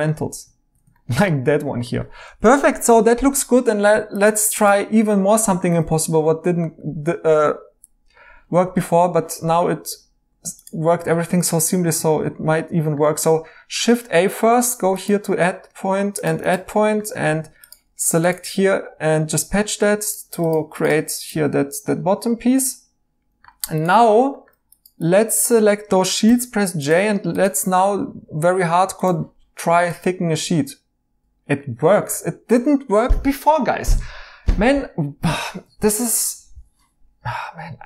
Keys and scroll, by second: 2.3-2.8 typing, 13.7 a, 17.1 2, 20.9 Tab, 21.6 Tab, 26.2 j, 31.2 Escape.